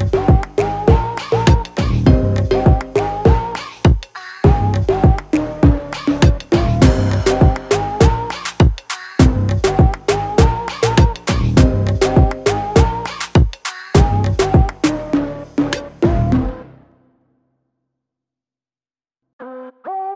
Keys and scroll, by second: 0.8 ctrl+0, 1.5 ctrl+t, 3.5 ctrl+0, 3.7 Tab, 3.8 Tab, 4.0 Tab, 4.2 ctrl+0, 4.4 ctrl+s, 8.2 ctrl+t, 10.1 ctrl+alt+shift+\, 12.1 Tab, 16.2 Return, 16.6 ctrl+t, 18.0 5, 18.5 z, 19.1 v.